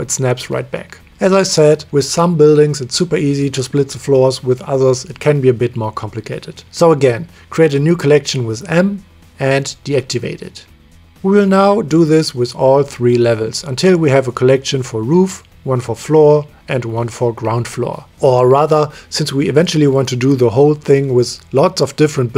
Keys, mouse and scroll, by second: 0.6-2.0 middle drag, 2.4 click, 2.6 middle click, 3.0 g, 6.8 m, 8.2 o, 10.2 click, 10.3 middle click, 10.9 middle drag, 11.1 KP_1, 11.6 shift+middle click, 13.7 middle click, 14.3 middle click, 15.0 m, 15.3 shift+middle click, 15.5-16.0 scroll up 1, 17.0 middle click, 17.3 click, 17.5 shift+middle click, 17.8 click, 17.9 middle click, 18.0 m, 19.9 click, 20.4 click, 20.8-22.0 drag, 22.0 shift+middle click.